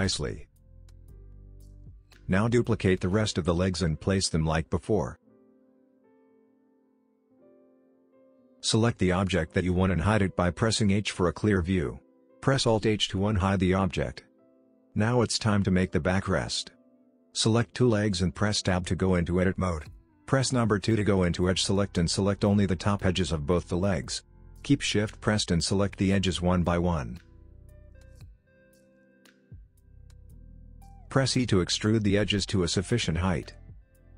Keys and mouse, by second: 1.3 KP_7, 1.5 g, 2.0 shift+d, 3.3 shift+d, 4.6 middle click, 5.0 Tab, 5.0 middle click, 5.3 Tab, 6.4 middle click, 8.0 click, 9.9 click, 11.0 middle click, 13.6 shift+click, 14.9 Tab, 16.1 middle click, 19.2 click, 20.7 click, 21.5 shift+click, 22.7 shift+click, 23.5 shift+click, 27.2 shift+click, 27.9 middle click, 28.7 middle click, 29.8 KP_1, 30.1 e.